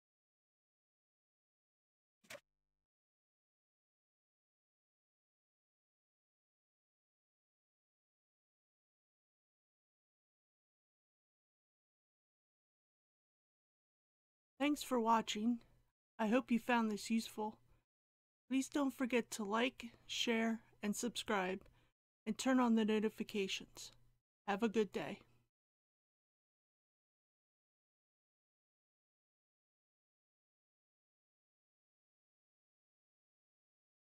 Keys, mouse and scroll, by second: 0.2 click.